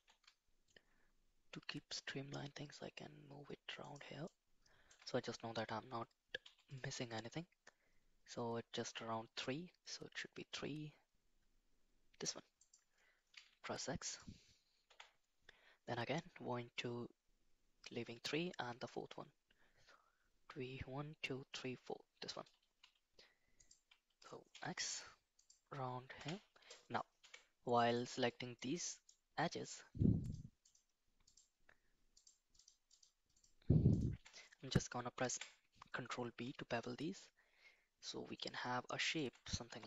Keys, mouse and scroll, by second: 4.3 shift+middle click, 6.4 k, 22.8 k, 27.2 2, 28.0-29.0 drag, 30.2 shift+click, 30.6 shift+click, 32.2 shift+click, 32.9 shift+click, 33.3 shift+click, 33.9 shift+click, 35.2 ctrl+b.